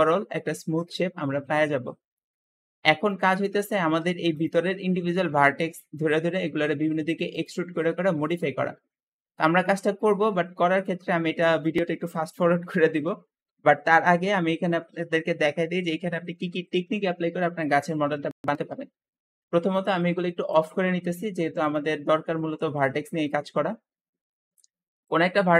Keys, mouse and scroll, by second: 3.1 Tab, 3.7 alt+z, 4.2 alt+click, 5.8 middle click, 6.4 e, 7.5 e, 8.7 alt+z, 9.1-12.2 alt+middle drag, 20.4 click, 21.5 click, 22.6-23.8 middle drag, 23.8-24.2 scroll up 1, 24.2 shift+middle click, 24.9 shift+click.